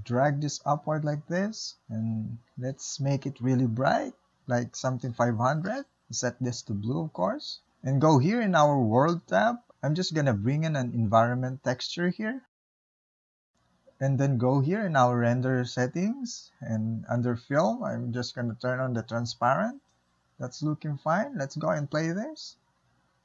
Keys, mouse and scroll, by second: 0.7 g, 5.4 KP_0, 6.5 Left, 11.1 drag, 12.1 click, 13.4-18.6 middle drag, 18.6 click, 19.6-22.7 middle drag, 22.7 space, 22.9 click.